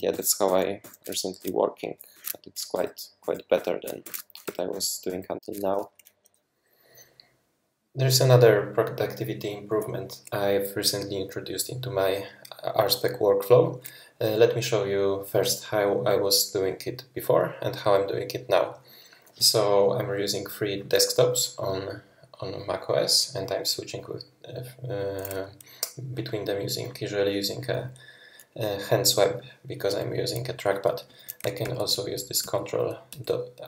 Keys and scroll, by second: 0.1 shift+super+y, 2.1 super+2, 2.7 shift+super+{, 3.2 shift+super+{, 3.5 shift+super+}, 4.0 super+2, 4.4 shift+super+}, 4.7 shift+super+{, 5.1 shift+super+{, 31.6 ctrl+Right, 32.0 ctrl+Right, 32.4 ctrl+Left, 32.6 ctrl+Right, 32.6 ctrl+Left, 33.1 ctrl+Left, 33.3 ctrl+Left.